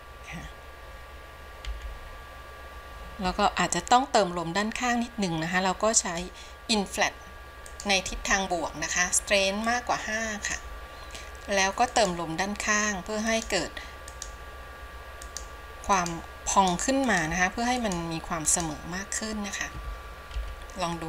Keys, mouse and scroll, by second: 6.2-20.5 drag, 20.5 KP_7.